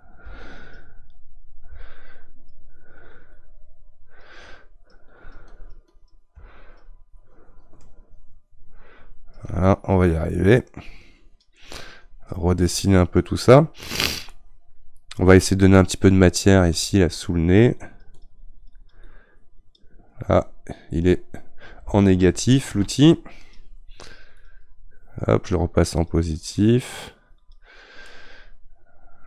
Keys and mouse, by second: 14.3-17.8 middle drag, 17.8-22.5 drag, 22.5 ctrl+z, 24.4-28.1 drag, 28.1-29.2 middle drag.